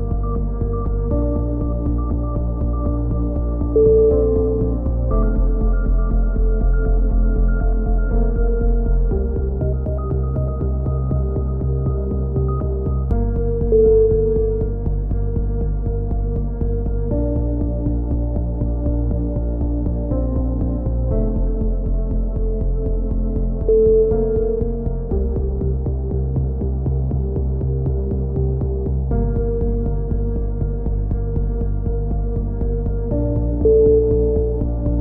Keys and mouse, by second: 0.5 middle click, 1.4 right click, 2.4 click, 7.2 right click, 7.6 middle click, 8.0 click, 9.2 a, 9.3 middle click, 9.5 z, 9.7 z, 11.4-12.9 middle drag, 14.1 middle click, 15.1-16.7 middle drag, 16.7 ctrl+r, 17.0-18.1 drag, 17.5 a, 18.1 shift+s, 18.7 a, 18.9 z, 19.3-20.9 drag, 20.3 k, 22.3 right click, 22.7 z, 23.1 right click, 24.9 click, 26.8 click, 30.1 a, 30.6 right click, 31.0 click, 32.5 a, 32.5 z, 34.2 z, 34.5-35.0 drag.